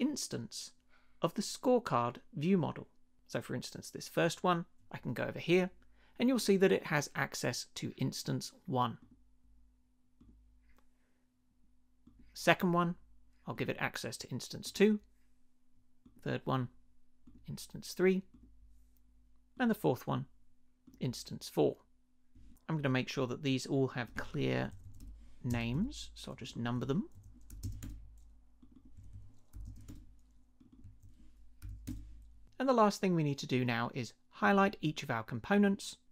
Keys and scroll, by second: 24.5 Left, 25.0 1, 25.5 space, 25.7 Return, 26.7 Left, 27.4 2, 27.6 space, 27.8 Return, 28.9 Left, 29.5 3, 29.6 space, 29.8 Return, 30.8 Left, 31.6 4, 31.7 space, 31.8 Return.